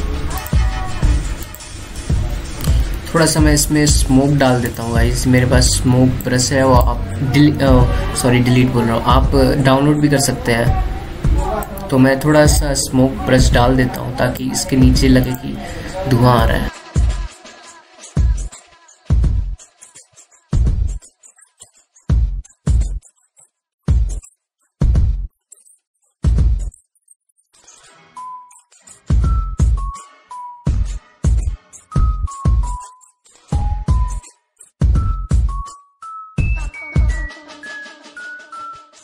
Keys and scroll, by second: 3.0 ctrl+z, 3.7 ctrl+alt+z, 17.2 ctrl+z, 19.1 ctrl+z, 19.9 ctrl+z, 21.7 ctrl+z, 22.3 ctrl+alt+z, 24.2 ctrl+alt+z, 26.0 ctrl+z, 26.8 ctrl+z, 28.1 ctrl+z, 28.8 ctrl+alt+z, 31.4 ctrl+alt+z, 32.9 ctrl+z, 35.2 ctrl+t, 38.4 Delete.